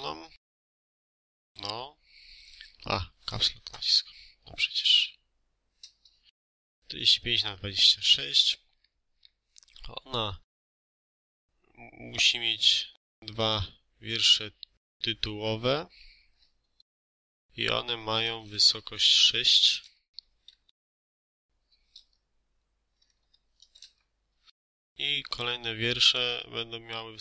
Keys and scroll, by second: 1.0 BackSpace, 1.4 Caps_Lock, 2.6 BackSpace, 3.4 5, 4.5 2, 4.7 6, 5.7 Return, 17.1 6, 18.1 BackSpace, 18.6 4, 18.7 5, 19.7 Return, 20.3 space, 23.0 5, 23.7 Return, 24.4 space.